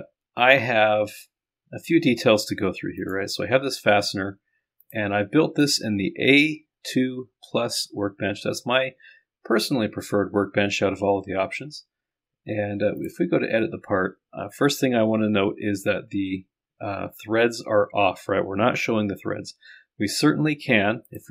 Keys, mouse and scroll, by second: 0.1-0.7 scroll down 1, 0.7-1.4 scroll up 1, 5.7 click.